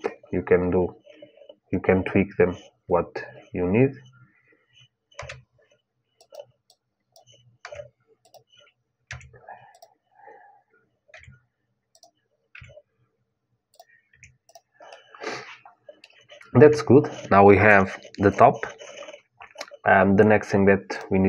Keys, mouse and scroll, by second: 4.9 s, 6.4-8.5 drag, 7.3 s, 8.8 e, 10.9 r, 12.3 g, 13.8 Tab, 14.2-16.4 drag, 16.4 middle click, 16.4 KP_1, 18.1-20.2 drag, 20.7-21.2 drag.